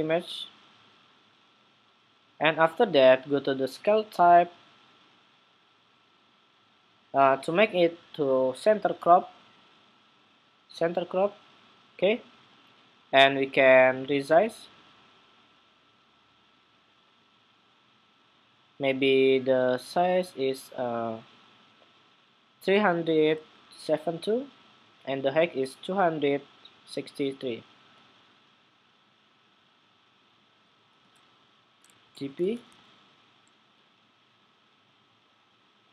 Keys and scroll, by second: 23.1 super+c, 23.3 super+c, 30.7 super+v.